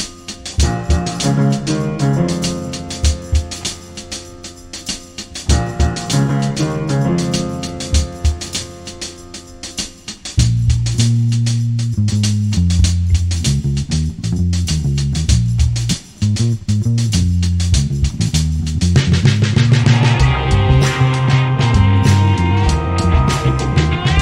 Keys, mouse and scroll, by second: 0.0-2.2 typing, 3.3 middle click, 3.8 middle click, 4.3 c, 4.7 click, 4.9 z, 5.0 b, 5.2 z, 5.7 click, 6.0 middle click, 6.9 KP_7, 7.3 KP_5, 7.3 g, 8.0 s, 9.2 ctrl+z, 9.5 s, 11.1-12.9 drag, 11.4 s, 12.2 s, 12.9 Tab, 13.2 KP_5, 14.4 ctrl+s, 14.8 a, 15.2 ctrl+s, 16.0-17.0 drag, 16.9 shift+d, 17.4 ,, 17.8 ., 18.2 r, 20.2 Tab, 20.9 Tab, 21.1 g, 21.9 a, 22.0 ctrl+s, 23.5 right click, 24.1 g.